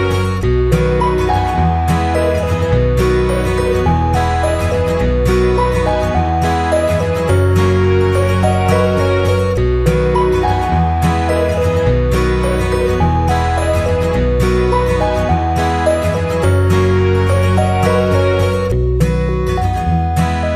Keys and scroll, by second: 6.2 Up, 12.2 ctrl+[.